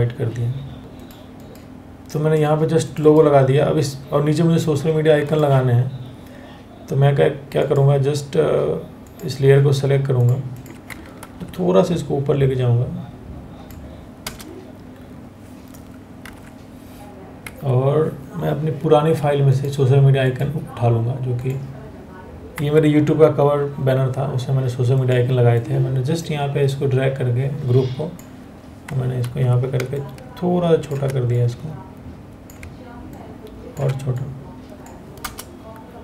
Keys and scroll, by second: 0.8 Escape, 10.9 ctrl+t, 13.8 Return, 15.9 ctrl+o, 17.1 Escape, 22.2 Escape, 28.8 ctrl+t, 34.8 Return.